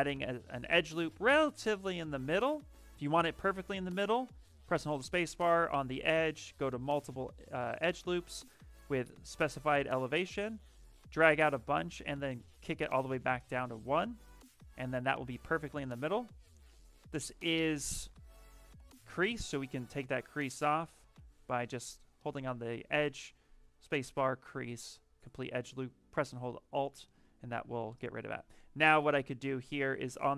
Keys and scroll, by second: 1.0 ctrl+z, 2.4 space, 16.8 space, 18.7 space, 23.1 space.